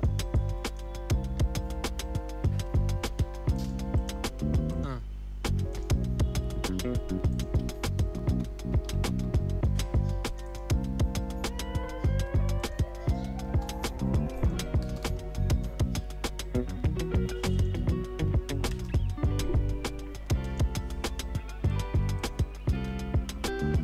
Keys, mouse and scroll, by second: 1.3 space, 3.2 space, 3.5 click, 3.9 right click, 5.0 click, 7.6 ctrl+a, 8.0-9.6 typing, 10.2 click, 13.8 Return, 14.4 click, 15.4 Return, 17.5 click, 18.7 Return, 20.4 click, 22.7 space.